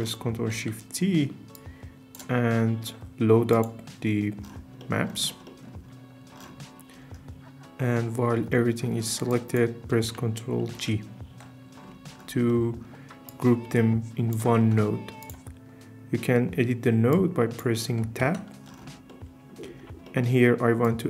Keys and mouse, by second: 0.6 ctrl+shift+t, 5.5 click, 10.7 ctrl+g, 11.3 Tab, 13.3 click, 18.2 Tab, 20.0 middle click, 20.8 click.